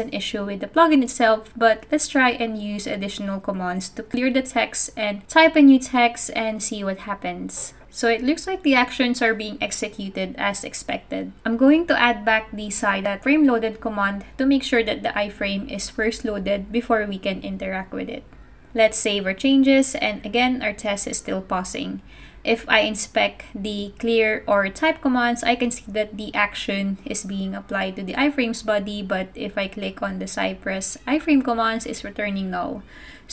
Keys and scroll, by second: 5.6-8.5 typing, 9.0 super+s, 11.9-13.3 typing, 16.6 super+c, 17.9 ', 18.2 super+v, 19.5 super+s, 20.0 super+Tab, 32.0 super+Tab, 32.6 super+Tab.